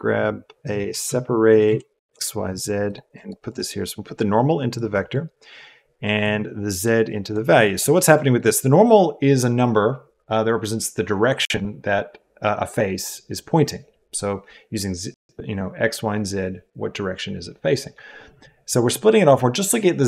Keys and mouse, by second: 3.1 click, 3.4 click, 3.8 click, 4.0-4.7 drag, 4.9 click, 6.2-7.3 drag, 8.1 click, 8.3 click.